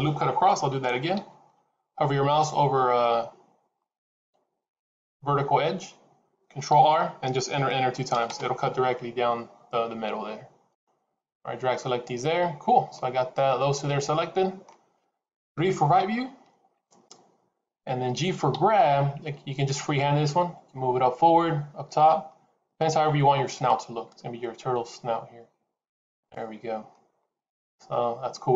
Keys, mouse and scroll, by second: 0.6 ctrl+z, 1.1 ctrl+z, 6.6 ctrl+r, 10.6 click, 12.5-12.8 scroll down 2, 12.8 middle click, 15.4 KP_3, 18.4 g, 26.6 scroll down 1, 26.7 middle click.